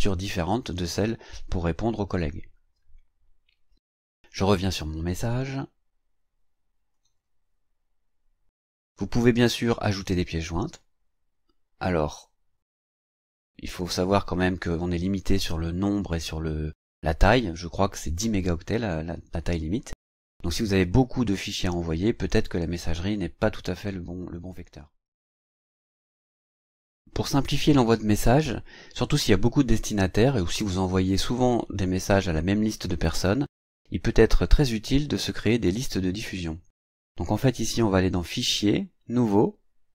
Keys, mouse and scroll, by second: 3.7 click, 5.2 click, 6.9 click, 37.4 click.